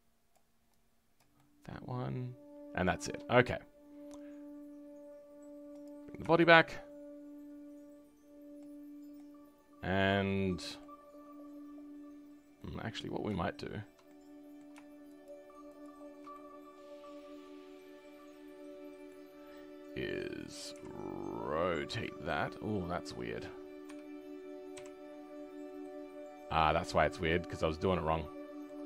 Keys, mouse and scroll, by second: 1.3-15.2 shift+middle drag, 15.2 shift+click, 15.8 shift+click, 16.3-20.8 middle drag, 20.8 r, 25.8-28.8 middle drag.